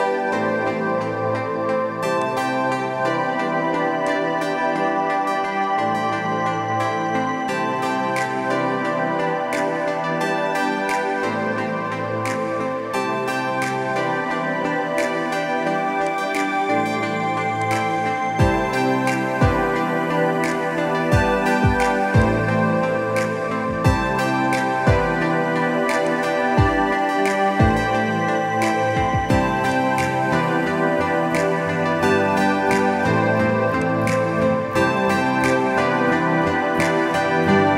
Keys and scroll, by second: 0.5 b, 25.2 [, 25.4 [, 36.2 ctrl+-, 36.3 ctrl+-, 36.5 ctrl+-, 36.6 ctrl+-, 37.2 ctrl+=, 37.4 ctrl+=, 37.6 ctrl+=.